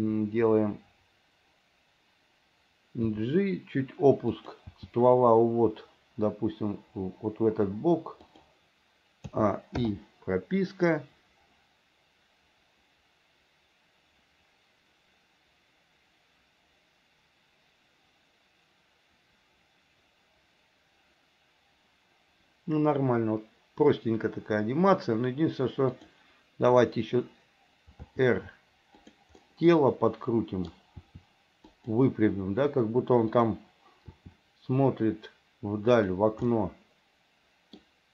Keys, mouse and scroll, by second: 3.2 g, 4.8 g, 9.4 a, 10.0 i, 11.0-25.2 drag, 28.1 r, 29.5-30.8 middle drag, 31.2 r, 34.2 r, 36.6-37.9 middle drag.